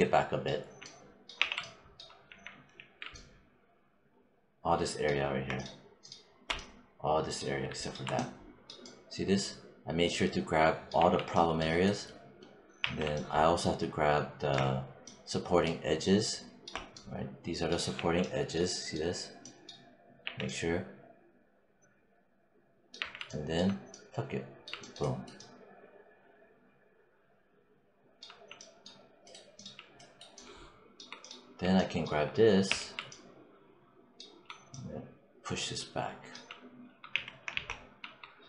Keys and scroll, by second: 0.4 5, 1.2 w, 2.1 5, 10.8 5, 12.6 4, 17.8 5, 20.0 4, 22.8 5, 32.5 e, 36.9 z.